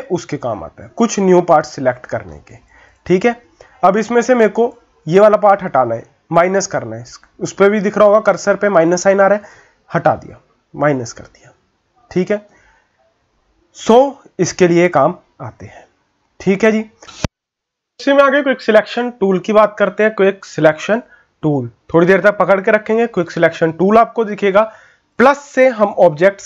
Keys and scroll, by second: 1.6 ctrl+z, 12.5 ctrl+z.